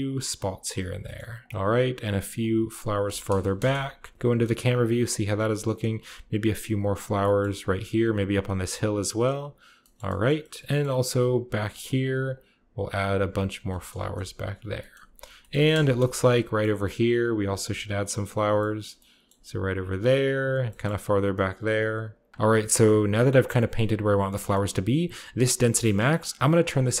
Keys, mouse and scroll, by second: 0.0 shift+click, 0.4 shift+click, 0.6 shift+click, 1.3 middle click, 1.3 click, 1.4 middle click, 1.5 KP_0, 1.5 click, 1.6 middle click, 1.9 click, 2.1 f, 2.3 middle click, 2.4-4.1 drag, 3.4 KP_0, 4.1-6.3 shift+middle drag, 4.4-6.2 shift+scroll up 1, 4.8 shift+click, 5.0 shift+click, 5.2 shift+click, 5.3 shift+click, 5.7 shift+click, 5.9 shift+click, 6.2-7.0 typing, 6.3 click, 6.4 click, 6.7 shift+click, 7.5 shift+middle click, 7.6 shift+click, 7.6 shift+middle click, 7.7 shift+click, 7.8 shift+middle click, 7.9 shift+click, 7.9 shift+middle click, 8.1 shift+click, 8.1 shift+middle click, 8.2 shift+click, 8.3 shift+middle click, 8.4 click, 8.4 middle click, 8.5 click, 8.5 middle click, 8.7 click, 8.8 middle click, 9.0 click, 9.0 middle click, 9.2 click, 9.7 shift+middle click, 10.8-12.7 scroll up 1, 11.1 f, 11.2 middle click, 11.4 middle click, 11.5 shift+click, 11.7 shift+click, 11.9 shift+click, 12.0 shift+click, 12.3 shift+click, 12.7 f, 13.0 click, 13.1 click, 13.3-14.6 drag, 13.8 KP_0, 14.6 middle click, 14.9 scroll up 1, 15.1 scroll down 1, 15.2-15.8 scroll up 1, 15.4 middle click, 15.6 KP_0, 16.8 shift+middle click, 16.9 shift+click, 17.0 shift+middle click, 17.1 shift+click, 17.1 shift+middle click, 17.2 shift+click, 17.4 shift+middle click, 17.5 click, 17.7 click, 17.8 click, 18.2 click, 18.3-19.6 shift+drag, 19.6 middle click, 19.7 click, 19.8 middle click, 20.1 click, 20.1 middle click, 20.4 shift+click, 21.3 middle click, 21.4 click, 21.5 middle click, 21.6 shift+click, 21.8 shift+click, 21.9 shift+click, 22.0 middle click, 22.1 click, 22.1 middle click, 22.2 click, 22.3 click, 23.3-24.4 scroll up 1, 24.4 scroll up 1, 25.6-27.0 drag, 26.3 1.